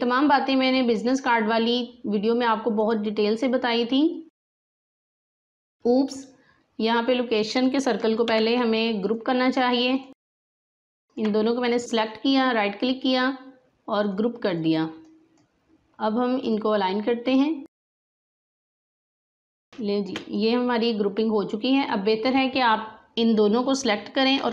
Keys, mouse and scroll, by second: 7.5 click, 8.2 ctrl+z, 9.0 click, 11.0 shift+click, 11.7 right click, 14.0-19.3 drag, 19.4 alt+scroll down 1, 19.7 space, 19.7-24.5 drag.